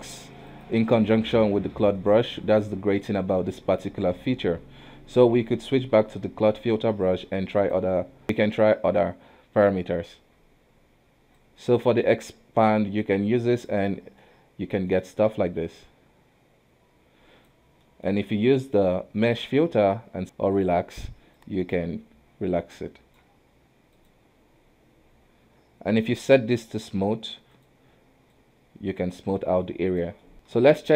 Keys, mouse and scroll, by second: 2.0-4.7 middle drag, 4.7 space, 7.6-8.2 drag, 12.6 click, 13.9 scroll down 2, 14.2-15.2 middle drag, 15.2 ctrl+z, 15.7 click, 17.8 middle click, 18.2 space, 20.2-21.4 drag, 23.9-27.1 drag, 28.3 click, 30.2 middle click, 30.3 space.